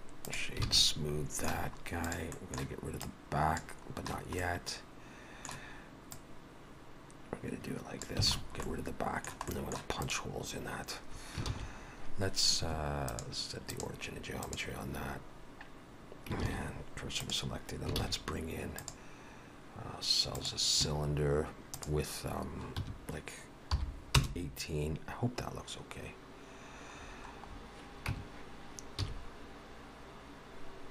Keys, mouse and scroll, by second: 0.7 alt+a, 0.8 middle click, 1.7-2.4 scroll up 2, 2.1 click, 2.4 middle click, 3.1 click, 4.5 middle click, 6.2 click, 8.3 alt+a, 8.4-8.8 scroll down 2, 8.7 middle click, 9.5 middle click, 10.1 click, 11.5 shift+s, 13.1 click, 16.5 shift+s, 18.0 shift+a, 21.8 click, 27.0-28.1 scroll down 8, 28.1 Tab, 29.0 s.